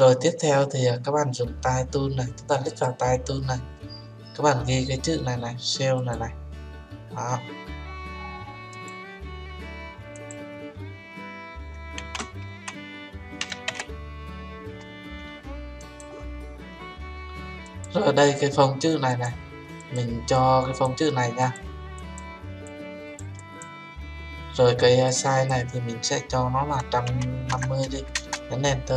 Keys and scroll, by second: 28.1 Return.